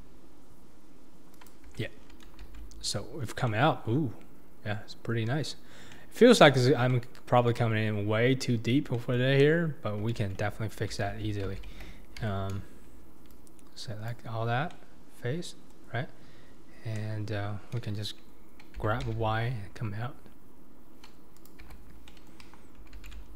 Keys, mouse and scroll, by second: 1.8 Tab, 2.0-2.4 scroll down 4, 2.4 alt+z, 2.9-3.2 scroll up 2, 3.2 scroll down 4, 3.5-6.6 middle drag, 6.6-6.9 scroll up 1, 6.9-9.4 middle drag, 9.4 KP_7, 10.2 alt+z, 10.6-11.1 scroll up 3, 11.1 alt+z, 11.5 alt+z, 12.2 Tab, 13.3 click, 14.7-17.0 middle drag, 17.0 KP_7, 18.8 g, 21.7 Tab, 22.1-22.4 middle drag, 22.4 KP_1, 23.0 alt+z, 23.2-23.3 scroll down 4.